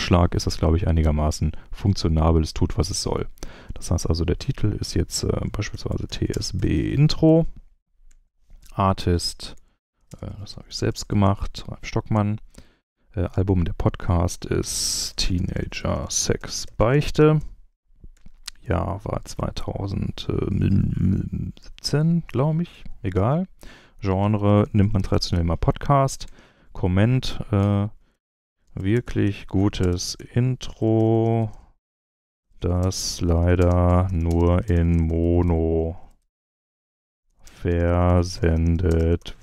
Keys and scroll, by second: 5.5-7.7 typing, 8.0 Tab, 9.1 shift+Tab, 9.1-11.7 typing, 12.1 Tab, 14.3-17.8 typing, 18.1 Tab, 19.0 2, 19.3 0, 20.2 1, 21.6 7, 22.7 Tab, 23.9-25.6 typing, 26.2 Tab, 27.7-39.4 typing.